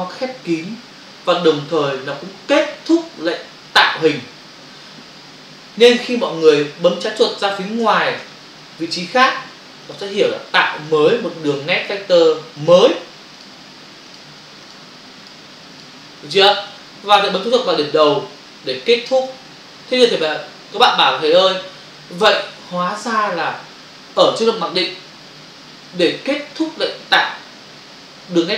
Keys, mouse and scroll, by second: 7.5 space, 9.9 click, 10.8 click, 10.9 click, 12.6 click, 12.7 double click, 13.3 click, 13.4 click, 14.2 double click, 14.7 click, 14.8 click, 15.2 double click, 15.7 click, 19.1 click, 19.3 click.